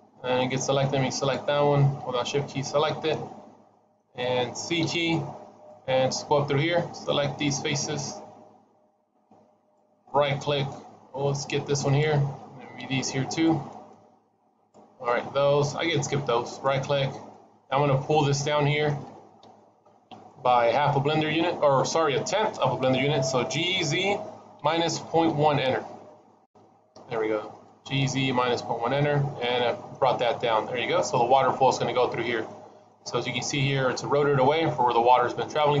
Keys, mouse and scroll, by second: 0.1-1.0 scroll down 3, 1.0 shift+click, 2.1 scroll up 2, 2.6 scroll down 2, 2.9 middle click, 4.6 c, 10.2 scroll down 2, 10.9-11.4 scroll up 2, 11.7 shift+click, 12.6 c, 16.7-17.2 scroll down 4, 17.2 middle click, 17.9 middle click, 19.3 KP_1, 20.0-20.4 scroll up 2, 23.4 g, 27.1-27.7 scroll down 2, 27.4 middle click, 29.3 middle click, 31.0 middle click, 32.3 middle click, 34.6 middle click, 35.4-35.8 scroll up 2.